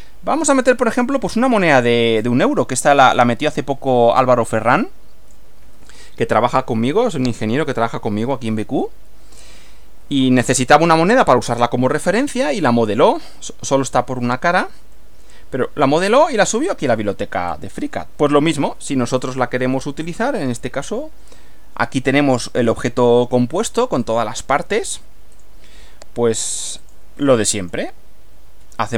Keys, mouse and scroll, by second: 3.2-5.5 drag, 12.1-14.1 middle drag, 14.9-16.1 middle drag, 16.5 middle click, 17.5 scroll down 1, 22.3 click, 24.0 click, 25.3 click, 26.8 click, 27.6 click.